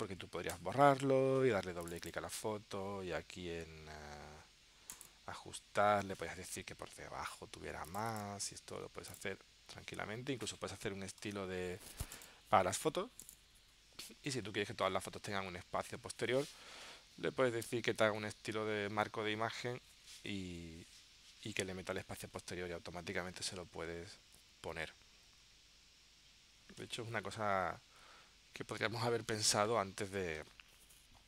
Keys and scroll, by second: 11.1 super+z.